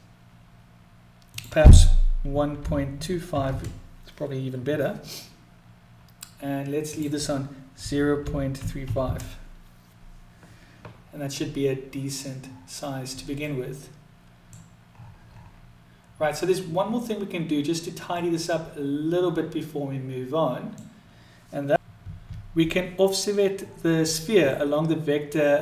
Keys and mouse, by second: 0.9-4.7 drag, 6.5-10.9 drag, 13.0-14.2 middle drag, 17.8-20.4 middle drag, 24.2-25.6 middle drag.